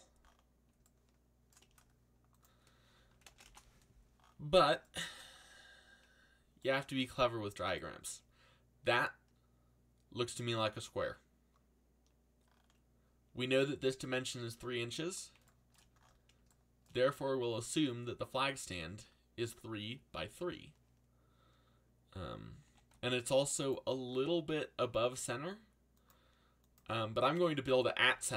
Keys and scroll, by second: 3.1 3, 3.4 ', 3.4 Return, 22.6 g, 22.9 x, 27.7 g, 28.0 x.